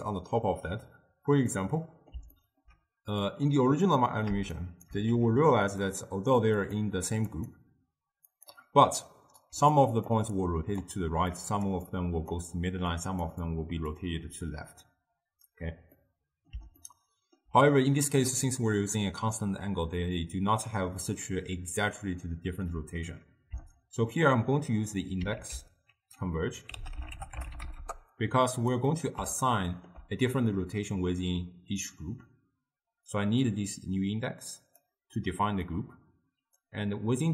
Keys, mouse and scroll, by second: 1.6-3.3 middle drag, 3.3 click, 4.6 shift+right click, 5.2 g, 6.6-9.6 drag, 9.6-14.6 typing, 9.9 click, 10.5 click, 11.5 click, 12.0 click, 13.0 click, 13.6 click, 16.0-19.9 middle drag, 25.4 ctrl+a, 29.0-32.6 middle drag, 33.2 drag, 35.3 click.